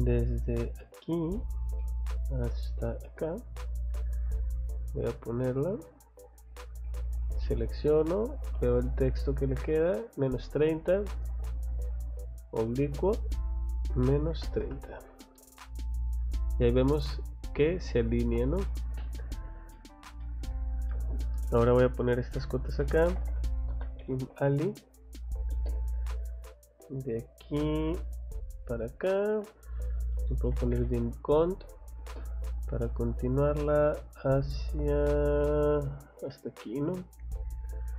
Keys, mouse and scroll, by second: 0.7 click, 0.9 scroll down 1, 1.3 middle click, 1.8 middle click, 3.5 click, 3.8 middle click, 6.6 click, 6.8 Escape, 7.3 click, 7.4 click, 8.4 click, 10.1 click, 11.3 click, 12.5 click, 15.0 Escape, 15.6 scroll down 2, 16.3 scroll up 2, 17.3 click, 17.5 click, 18.2 scroll down 1, 18.6 middle click, 19.7 middle click, 20.2 middle click, 20.9 middle click, 21.4 middle click, 22.6-23.7 typing, 25.5 space, 27.2 click, 28.5 click, 29.3 click, 30.0-31.5 typing, 32.8 middle click, 36.5 click, 36.7 Escape.